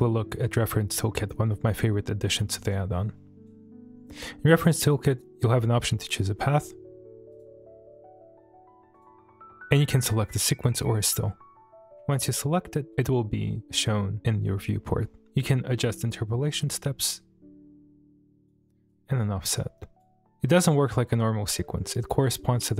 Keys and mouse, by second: 7.3 click, 12.2 shift+middle drag, 12.6-12.9 middle drag, 13.5 middle click, 16.6-18.5 drag, 18.9-20.0 drag.